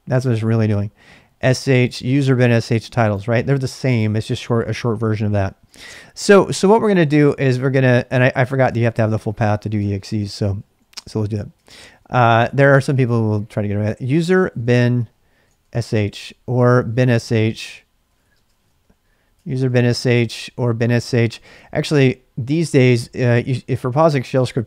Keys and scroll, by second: 5.7 ctrl+[, 5.9 k, 6.2 k, 7.4 k, 8.7 ctrl+c, 9.0-24.6 typing, 10.9 Return.